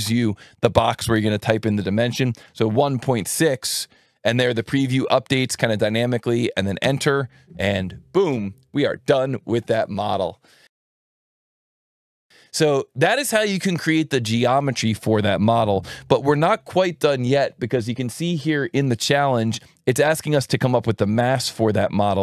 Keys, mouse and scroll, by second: 2.4 KP_1, 2.8 KP_Decimal, 3.2 KP_6, 6.8 KP_Enter, 18.4 click, 21.0 alt+1.